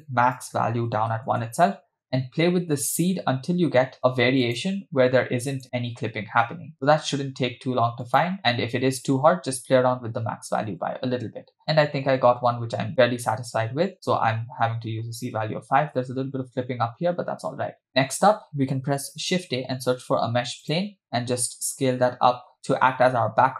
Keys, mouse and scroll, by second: 0.4-1.4 shift+drag, 2.8 click, 4.0 click, 4.4 click, 5.6 click, 6.7 space, 7.9 space, 8.1 click, 10.9 space, 18.0 click, 18.5 space, 19.4 shift+a, 21.7 ctrl+s.